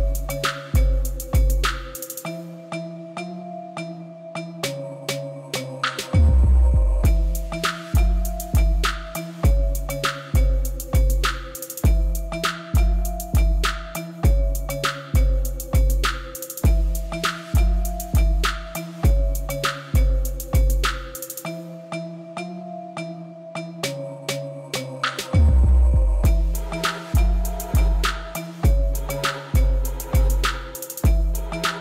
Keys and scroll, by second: 0.7 g, 0.9 z, 2.5 Tab, 3.4 g, 3.6 z, 5.0 alt+a, 9.2 Tab, 16.6 ctrl+r, 17.3 3, 19.2 Return, 20.1 Return, 21.1 3, 22.8 Tab, 24.7 Tab, 25.8 i, 29.6 Tab, 30.8 alt+a.